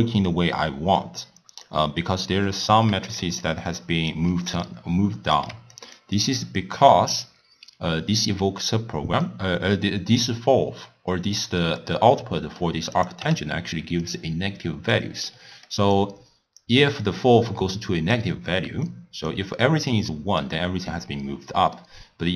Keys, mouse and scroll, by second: 2.9-6.7 typing, 3.2 click, 3.7 click, 4.7 right click, 5.8 click, 6.2 click, 9.7-13.0 middle drag, 13.0 click, 13.2 w, 15.3-16.0 middle drag, 16.0 click, 16.9-18.9 middle drag, 18.9 click, 21.6 middle click.